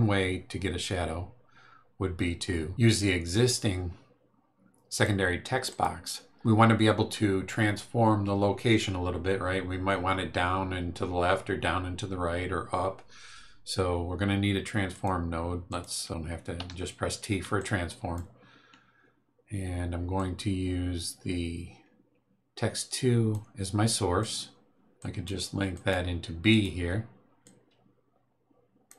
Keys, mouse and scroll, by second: 2.6-5.2 drag, 5.2-5.7 scroll up 2, 5.7 click, 14.9 click, 15.7 click, 16.1 click, 16.6 t, 17.5 click, 20.1-23.5 drag, 24.2 click, 24.9 click, 25.7 click, 26.5 click, 27.4-28.9 drag.